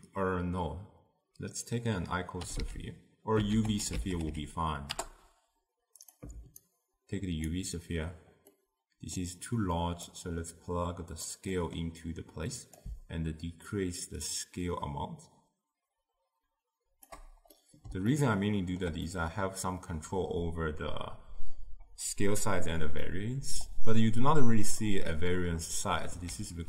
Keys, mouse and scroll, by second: 7.6-8.6 alt+right drag, 8.6-11.3 middle drag, 11.3 click, 13.9-17.6 shift+drag, 17.6-26.6 middle drag.